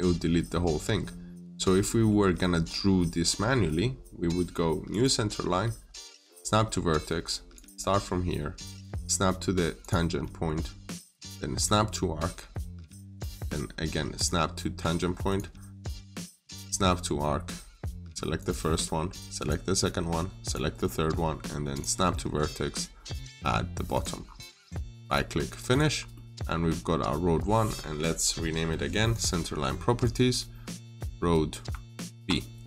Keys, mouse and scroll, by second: 1.7 middle click, 4.7 click, 8.2-8.8 scroll up 1, 9.6 click, 10.0 middle click, 11.4 click, 20.6 middle click, 21.6 click, 22.0 middle click, 23.3-23.8 scroll up 1, 23.8 click, 24.1 scroll down 1, 24.4 middle click, 24.9 right click, 25.5 click, 25.8 scroll down 1, 26.0 middle click, 26.4 scroll up 1, 29.0 click.